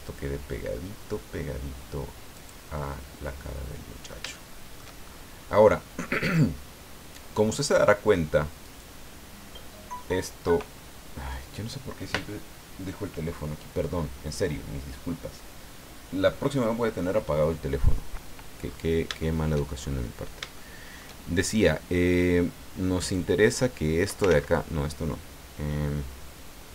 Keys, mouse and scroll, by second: 2.3 click, 2.8-5.0 middle drag, 5.0 shift+scroll up 1, 5.4 scroll down 1, 5.7 click, 6.7-7.0 scroll up 1, 8.6 right click, 18.6 scroll up 1, 19.2 shift+middle click, 19.8-20.2 shift+scroll up 1, 20.5 shift+middle click, 23.1-24.3 drag, 24.3 ctrl+z.